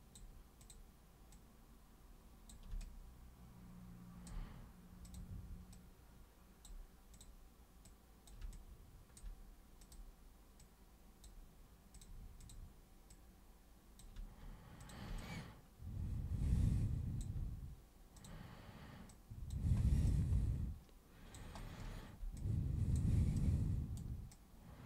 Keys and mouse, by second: 0.6 super+click, 1.4 super+click, 2.8-4.3 alt+super+drag, 5.0 super+click, 5.8 super+click, 7.2 super+click, 7.9 super+click, 8.5-9.2 alt+super+drag, 9.8 super+click, 10.6 super+click, 11.9 super+click, 12.4 super+click, 13.1 super+click, 14.8 super+click, 15.2-17.2 alt+super+drag, 18.2 super+click, 19.1 super+click, 20.1-21.4 alt+super+drag, 22.4 alt+super+click, 23.4 right click, 24.3-24.8 drag.